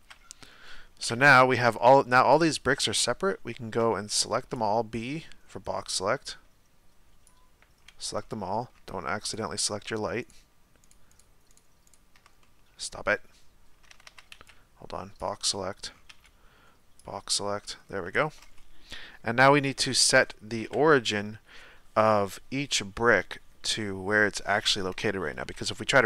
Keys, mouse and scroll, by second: 1.0 KP_1, 1.8-7.3 shift+middle drag, 7.3 b, 8.2-9.3 middle drag, 9.3 shift+right click, 10.3 shift+right click, 10.8 shift+right click, 11.5 shift+right click, 12.4-13.9 middle drag, 13.9 a, 14.1 a, 15.2 b, 15.5-16.1 middle drag, 16.1 b, 17.6-20.7 middle drag, 20.7 KP_1, 25.8 r.